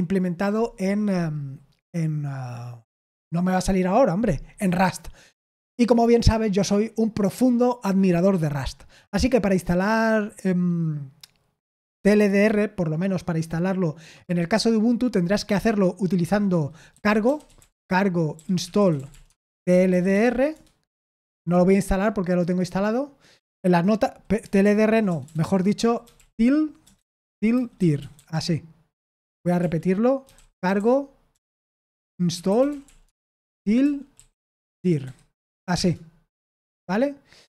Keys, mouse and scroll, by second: 16.9-20.6 typing, 21.3 ctrl+c, 24.6 ctrl+p, 25.0-28.6 typing, 29.1 ctrl+c, 29.5 ctrl+l, 30.0-34.7 typing, 35.8 Return, 36.6 ctrl+c.